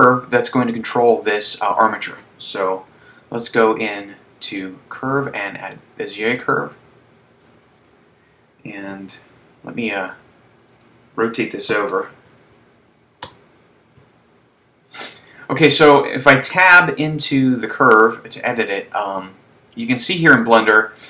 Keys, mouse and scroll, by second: 2.8 shift+a, 7.9 KP_1, 9.1 g, 10.9 click, 12.0 r, 14.0 KP_3, 16.9 Tab, 18.4 shift+middle click, 19.9-20.9 scroll up 4.